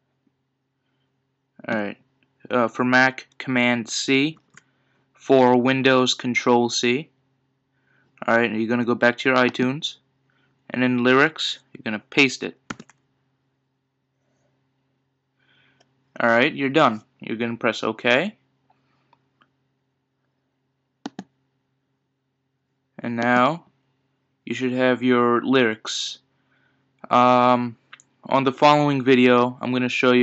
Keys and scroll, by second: 4.3 super+c, 12.7 super+v.